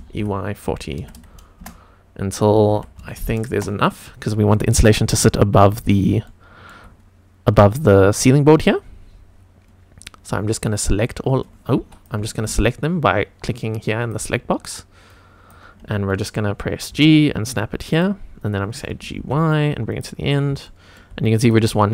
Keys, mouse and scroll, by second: 0.0-0.9 typing, 1.5 Return, 2.5 e, 2.6 y, 2.9 KP_4, 3.5 Return, 3.5 KP_0, 6.2 shift+middle click, 8.2-9.2 scroll down 5, 9.2-10.7 scroll up 4, 10.7 click, 11.7 Escape, 14.0 click, 15.0 click, 16.8 g, 17.8 click, 19.0 g, 19.1 y, 19.8 click, 20.2 scroll up 2, 20.6 shift+middle click, 21.3 click.